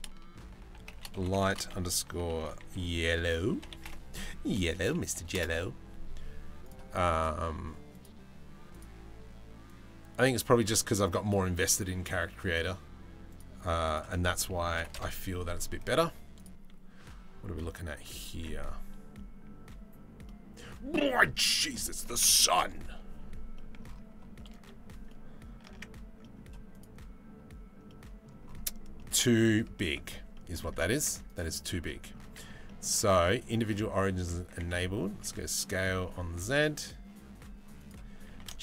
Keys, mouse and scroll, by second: 5.0 l, 6.2-7.7 right drag, 8.3 middle click, 12.9 middle click, 13.5-14.6 middle drag, 19.9 middle click, 21.3 middle click, 23.2 middle click, 24.7 middle click, 25.4 Tab, 25.9 middle click, 27.5 middle click, 28.6-29.0 middle drag, 29.5 Tab, 30.1 middle click, 30.6 Tab, 30.9 middle click, 31.5 Tab, 31.5 middle click, 32.4 middle click, 33.2 middle click, 34.1 s, 37.8 g.